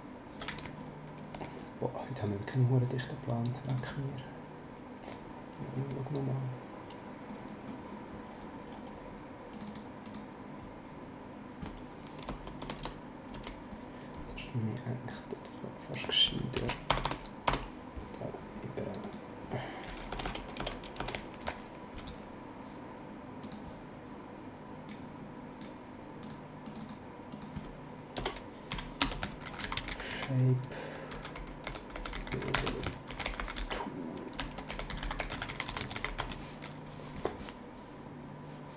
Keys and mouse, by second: 3.7 click, 9.5 click, 12.2 BackSpace, 15.0 click, 16.5 ctrl+c, 16.9 BackSpace, 19.0 click, 20.1 Return, 21.3 ctrl+v, 22.0 right click, 23.4 click, 24.8 click, 26.2 click, 28.1 Return, 29.0-33.2 typing, 34.3-36.6 typing.